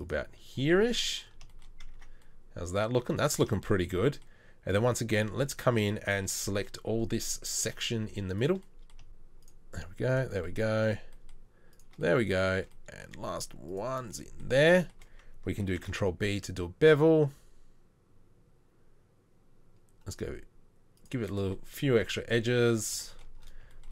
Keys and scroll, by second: 1.9 Tab, 3.1 Tab, 15.7 ctrl+b.